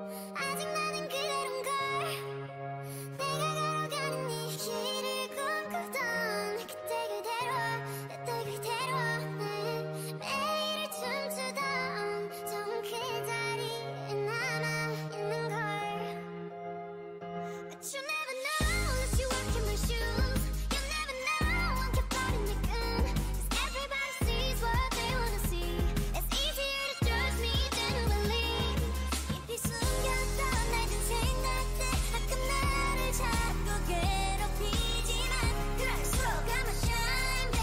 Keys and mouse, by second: 0.8 x, 1.1 a, 3.7 KP_1, 4.7 k, 7.0-10.8 drag, 7.3 x, 7.8 a, 12.2 KP_1, 12.9 KP_9, 14.0 k, 14.8 click, 16.1 k, 20.5 x, 21.3 a, 24.9 ctrl+r, 25.0-27.2 drag, 28.6-30.4 right drag, 29.0 o, 29.4 g, 30.6 Tab, 32.0 click, 32.4 Tab, 35.4 x, 37.1-37.6 drag, 37.3 x.